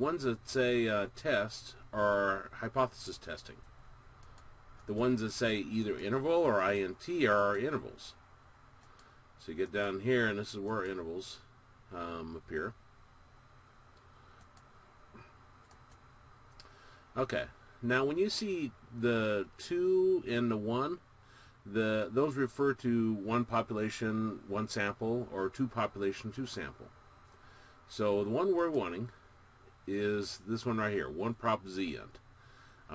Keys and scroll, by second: 4.6 Down, 5.2 Down, 6.0 Down, 6.6 Down, 7.3 Down, 7.9 Down, 9.0 Down, 9.8 Down, 10.9 Down, 14.6 Down, 15.9 Down, 29.0 Up.